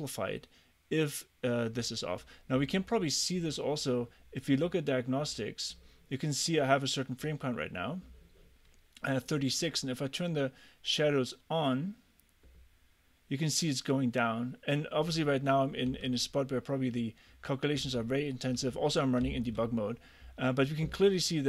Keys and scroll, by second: 15.9 a, 17.8 w, 18.6 a, 19.3 s.